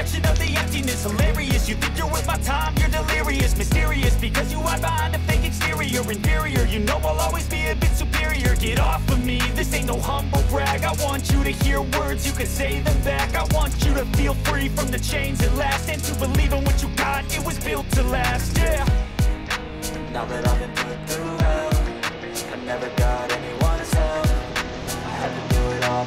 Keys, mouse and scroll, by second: 0.5 click.